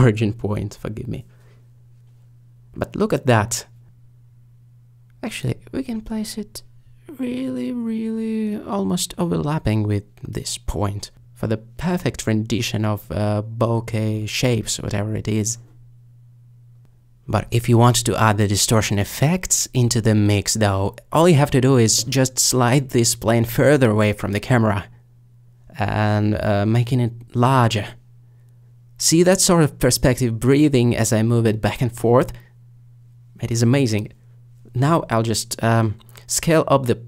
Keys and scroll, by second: 1.5 alt+,, 5.3 alt+g, 5.4 alt+z, 19.7 alt+shift+g, 19.7 alt+shift+z.